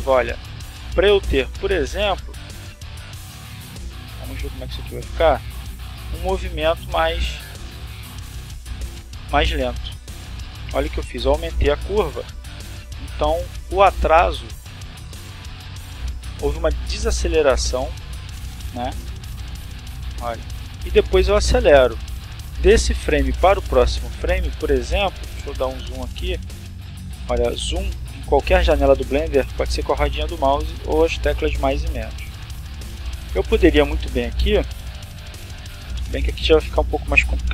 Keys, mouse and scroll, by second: 0.0 click, 1.4-2.8 drag, 3.8 click, 4.7 click, 5.9 click, 8.1 click, 8.7 click, 9.9-10.8 drag, 12.2 click, 13.1 click, 14.1 click, 16.1 click, 16.9 click, 18.1-20.1 drag, 21.8-22.4 scroll up 4, 22.7 shift+middle click, 23.4-24.4 shift+scroll up 5, 24.5-24.9 scroll down 2, 24.9 scroll up 2, 25.1 scroll down 2, 25.3 scroll up 2, 25.5 scroll down 2, 25.6 scroll up 2, 26.0 scroll down 2, 26.1 scroll up 2, 26.3 scroll down 2, 26.5 scroll up 2, 27.3-28.3 shift+middle drag, 29.3 middle click, 31.3 middle click, 32.2 click, 33.2 right click, 34.0 g, 36.8 click, 37.4 right click.